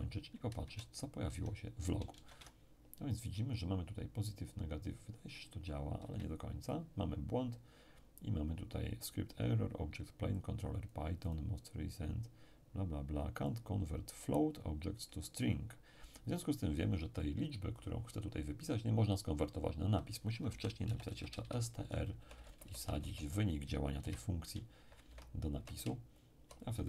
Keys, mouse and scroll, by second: 0.6 alt+Tab, 1.3 Tab, 2.1 alt+shift+Tab, 5.3-6.0 scroll down 1, 6.0-6.7 scroll down 1, 6.0 space, 10.3 click, 13.5-16.3 drag, 17.1 click, 17.7 click, 20.4 s, 20.8 t, 21.0 r, 21.4 shift+9, 22.1 shift+Right, 24.0 0, 24.7 Up, 24.9 Up, 25.1 Left, 25.5 Right, 25.8 Right, 26.1 Right, 26.7 Left.